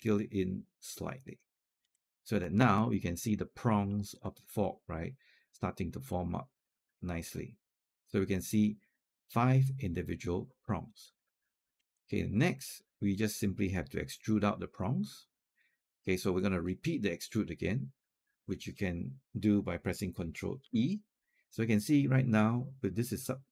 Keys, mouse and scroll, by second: 1.4 click, 1.9 alt+click, 2.7 alt+click, 3.7 alt+middle click, 4.6 alt+click, 5.9 click, 6.7 alt+click, 11.2 alt+middle click, 11.7 alt+click, 21.9 ctrl+e.